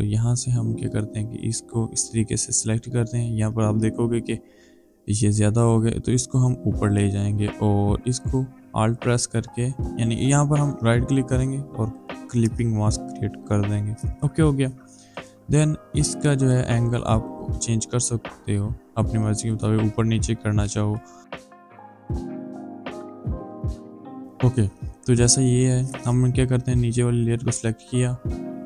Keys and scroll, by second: 18.9 ctrl+z, 20.1 ctrl+t, 21.9 space, 22.5 ctrl+z, 22.7 ctrl+z, 22.8 ctrl+t, 22.9 shift+Up, 23.0 Down, 23.1 Return, 23.3 ctrl+z, 23.6 Up.